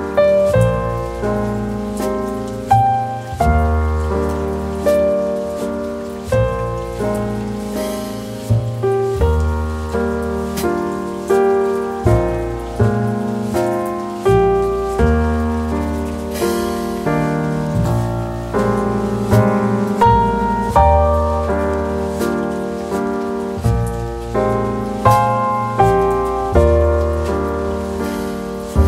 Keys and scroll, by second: 11.0 ctrl+z, 11.3 ctrl+z.